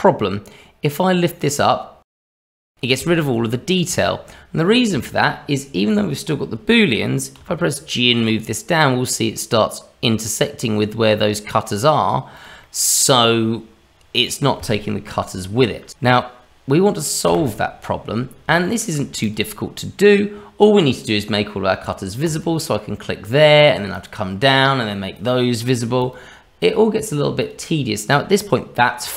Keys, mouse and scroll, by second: 2.1-3.5 scroll up 2, 3.5 middle click, 3.5-3.9 scroll up 1, 4.0 shift+middle click, 4.6 middle click, 5.0 shift+middle click, 7.3 g, 12.6 middle click, 13.9-15.6 scroll down 2, 17.3 Delete, 18.6 shift+middle click, 19.2 click, 23.9 click, 25.1 click, 26.0 click, 26.6 click, 27.4 click, 29.0 scroll up 1.